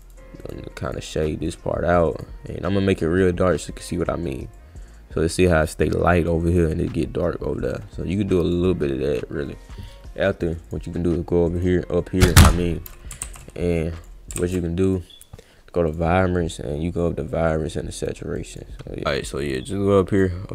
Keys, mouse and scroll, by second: 0.0 click, 0.4 click, 0.9 click, 1.2 click, 1.5 click, 2.1 click, 3.5 click, 4.5-8.5 drag, 10.7 click, 11.5 click, 13.2 ctrl+z, 14.0 click, 14.4 ctrl+z, 14.9 click, 15.9 click, 17.3 click, 18.4 click, 19.5 click.